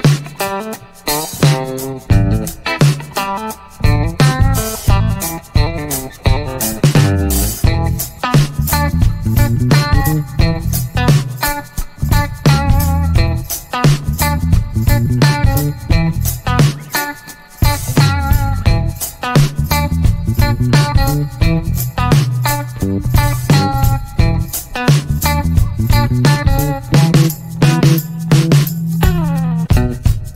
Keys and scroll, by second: 2.5-4.6 typing, 5.1 Return, 9.9-11.4 typing, 11.6 Return, 18.0-19.5 typing, 20.1 Return, 26.7 g, 29.2 Return.